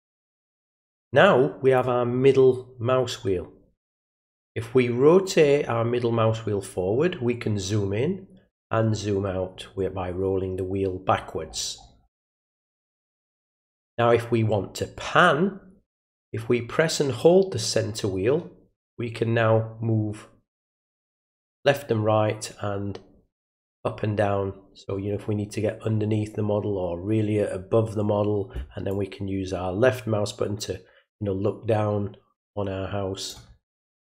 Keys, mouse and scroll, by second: 4.4-8.0 middle drag, 8.0-11.1 scroll down 1, 11.1 scroll down 1, 11.4-12.2 scroll up 1, 12.2 scroll down 1, 12.4 scroll up 1, 12.5 scroll down 1, 13.1-14.2 scroll up 1, 17.2-21.2 middle drag, 21.6-28.0 middle drag, 28.9-33.3 drag, 33.6-34.1 middle drag.